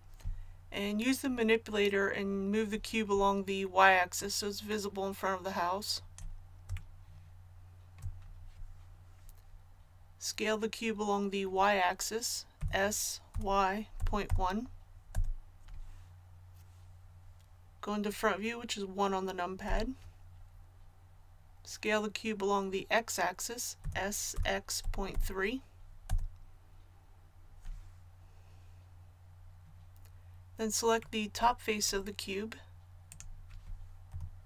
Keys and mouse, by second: 4.1-12.5 drag, 12.5 s, 19.6 KP_1, 23.8 s, 34.0 KP_1.